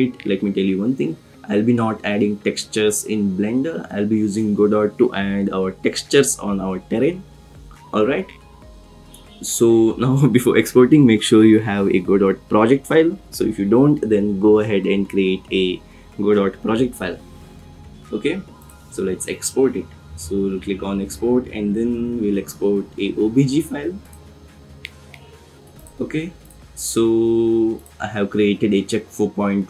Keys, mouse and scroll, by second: 18.7-24.2 drag.